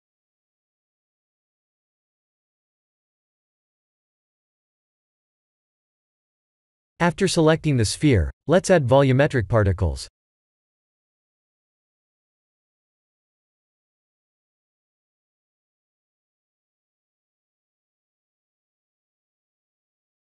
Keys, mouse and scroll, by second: 1.5 click, 2.1-4.5 scroll down 9, 4.5-5.6 scroll down 3, 5.8 click, 7.0 click, 9.9 click, 10.0 click, 11.1-12.9 scroll down 4, 12.9 scroll down 1, 13.1 click, 17.3-18.3 scroll up 10.